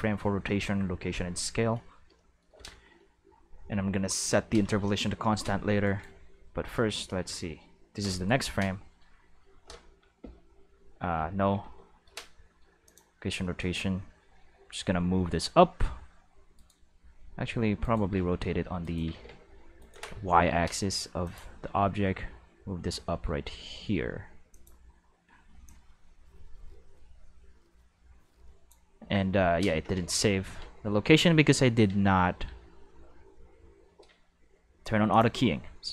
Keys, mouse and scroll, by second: 5.8 right click, 10.2 o, 11.1 o, 11.6 i, 12.8 click, 13.5 middle drag, 14.5 g, 16.5 right click, 17.0 r, 17.8 right click, 18.0-20.2 typing, 18.8 right click, 19.8 right click, 21.2 click, 24.5 click, 25.6-28.7 drag, 29.9 ctrl+z, 30.6 ctrl+z, 31.2 ctrl+z, 31.9 ctrl+z, 35.1 click.